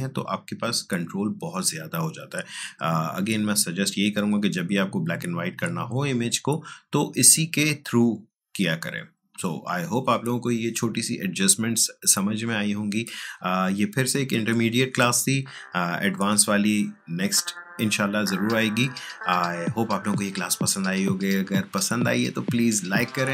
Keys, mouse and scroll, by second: 3.4-9.1 drag.